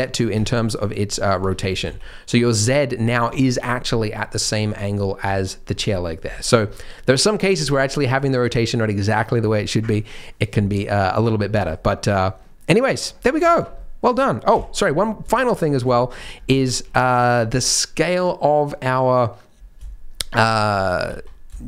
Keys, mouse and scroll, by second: 0.3 Tab, 1.4 Tab, 1.7 g, 4.0-4.7 scroll down 7, 5.2 Tab, 11.0-11.5 scroll down 4, 11.5 middle click, 11.7-12.4 scroll up 6, 12.4 middle click, 12.7 middle click, 13.1 scroll down 2, 13.4 shift+middle click, 13.6 shift+middle click, 13.7 middle click, 14.5 KP_3, 15.0 scroll up 3, 15.3 shift+middle click, 15.7 scroll up 2, 15.9 shift+middle click, 16.3 scroll down 2, 16.5 shift+middle click, 20.4 shift+middle click, 20.8 scroll up 2, 21.0 z, 21.5 shift+middle click.